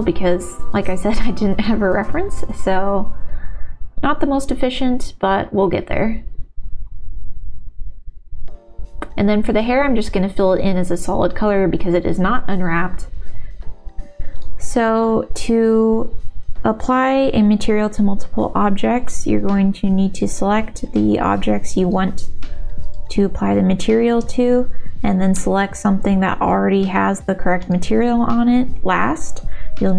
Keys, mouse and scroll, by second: 1.3 click, 10.3 click, 10.8 shift+g, 11.5 click, 12.3 middle click, 13.1 ctrl+l.